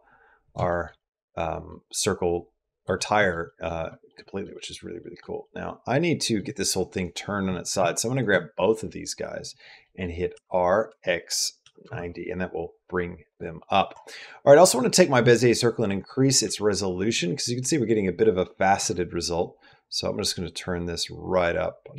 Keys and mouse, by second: 0.5 shift+middle click, 0.8 middle click, 1.7 middle click, 2.9 middle click, 3.2 middle click, 3.7 shift+middle click, 4.0 middle click, 4.3 middle click, 4.8 middle click, 5.2 middle click, 7.9 shift+click, 8.4-9.4 middle drag, 9.6 middle click, 10.1 r, 13.1 click, 13.4 middle click, 14.5 click, 15.7 click, 19.6-21.9 drag.